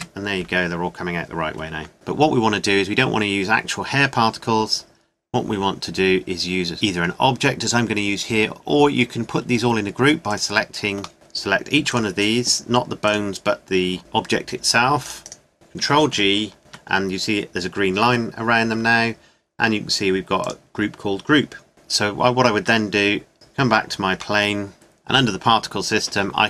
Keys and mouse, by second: 3.6-5.3 middle drag, 11.1 KP_Decimal, 15.5 ctrl+p, 16.1 ctrl+g, 20.4-22.6 right drag, 22.6 Tab, 23.3 KP_Decimal.